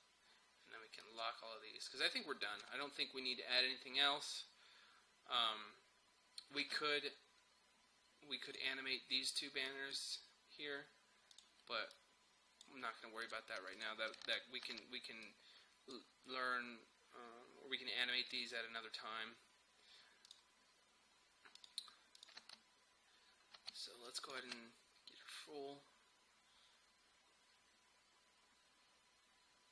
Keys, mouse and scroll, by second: 2.7 space, 6.7 space, 8.5 click, 14.7 ctrl+s, 15.3-18.4 drag, 22.4 space, 24.1 click, 24.4 space.